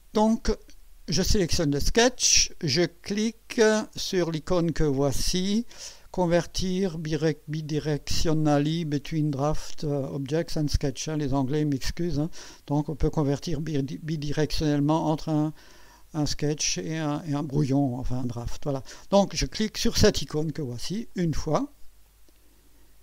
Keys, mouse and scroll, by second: 21.1 click, 22.0-22.7 drag.